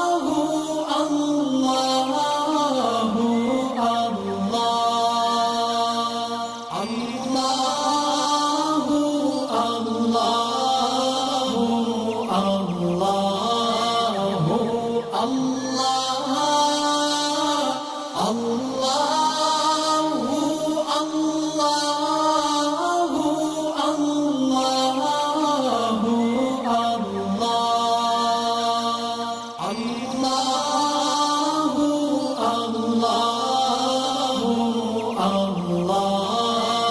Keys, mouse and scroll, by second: 0.0 ctrl+z, 1.2-1.9 click, 2.0 ctrl+z, 2.7 click, 5.3 alt+scroll up 1, 6.0-7.4 drag, 8.4 alt+scroll down 2, 9.0 alt+scroll up 2, 9.8-10.1 click, 18.0 ctrl+z, 18.1 click, 19.2 alt+scroll down 1, 19.6 space, 19.6 click, 20.1 alt+scroll up 1, 21.0 alt+scroll up 1, 21.2 click, 22.5-23.6 alt+shift+drag, 24.3 alt+scroll down 1, 24.8 space, 24.8 click, 24.9 click, 25.4 alt+scroll up 1, 25.9 click, 26.7 alt+scroll down 1, 27.0 click, 29.9 click, 31.8 alt+scroll down 2, 32.1 space, 32.2 click, 32.7-33.3 alt+scroll up 1, 33.5 space, 33.6-34.3 click, 34.1 space, 34.4 alt+scroll down 1, 34.7 click, 34.8-35.8 space, 36.2-36.9 drag.